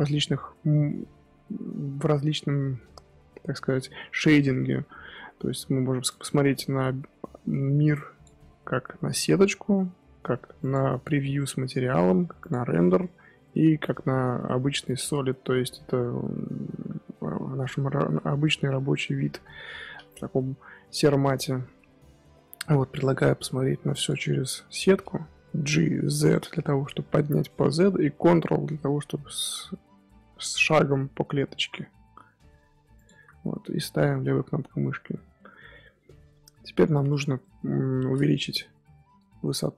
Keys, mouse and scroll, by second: 9.6 z, 11.9 z, 13.0 z, 16.6-19.2 middle drag, 19.2 KP_1, 22.7 z, 24.5-25.5 scroll up 2, 25.5 g, 33.8-34.7 scroll down 1, 34.7-37.6 shift+middle drag, 37.6 scroll up 1, 37.7 scroll down 2, 37.8 scroll up 1, 37.9 middle click, 38.4 KP_1, 39.3-39.7 shift+middle drag.